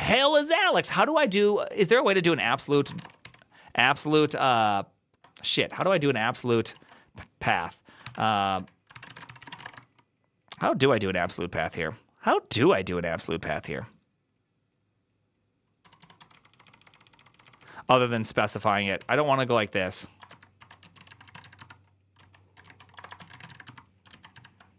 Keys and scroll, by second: 2.5-3.6 typing, 6.6 alt+{, 7.2-9.9 typing, 16.3-24.7 typing.